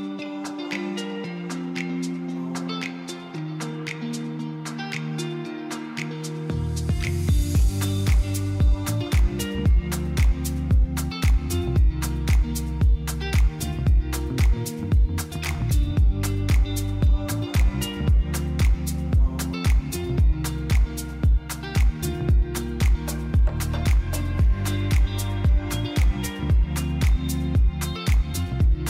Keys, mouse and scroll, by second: 1.4-3.1 drag, 3.1 KP_3, 4.1 click, 5.4 click, 6.4 click, 14.9-15.9 drag, 16.0 click, 18.5 click, 18.8 middle click, 19.5 click, 20.7 click, 21.4 KP_3, 22.4 g, 22.9 z, 23.8 click, 24.1 middle click, 24.6 click.